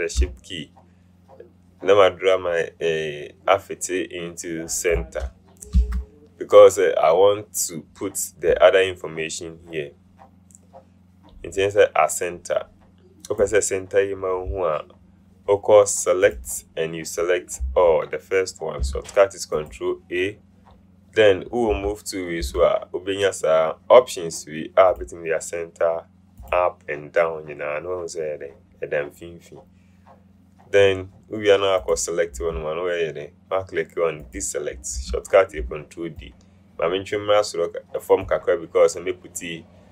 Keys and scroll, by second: 5.9 shift+v.